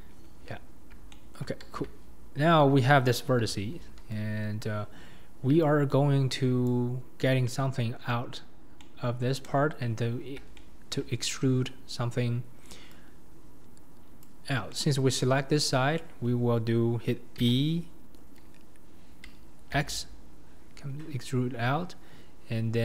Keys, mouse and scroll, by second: 0.8-1.1 scroll up 1, 1.1-1.8 shift+middle drag, 1.8 Tab, 3.4 1, 4.6 click, 6.7 click, 7.4-8.5 middle drag, 8.5 scroll up 2, 8.8 middle click, 9.4 KP_7, 10.6-14.2 shift+middle drag, 14.2 click, 14.7 middle click, 15.2 KP_1, 17.5 e.